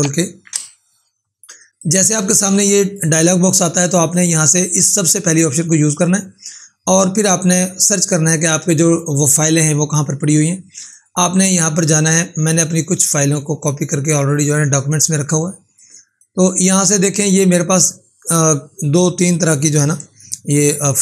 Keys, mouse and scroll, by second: 0.4 ctrl+k, 1.7-3.0 drag, 10.8 click, 14.7-17.4 drag, 20.4 ctrl+4.